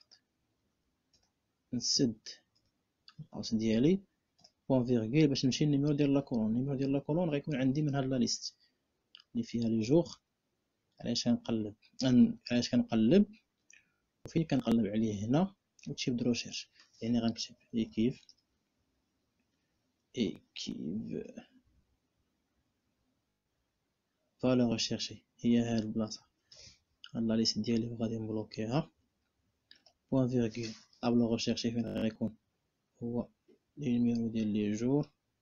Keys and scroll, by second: 0.8 ., 1.6 BackSpace, 2.3 [, 4.1 ., 17.2-18.2 typing, 20.0 q, 20.2 u, 20.9 i, 27.9 F4, 29.4 ..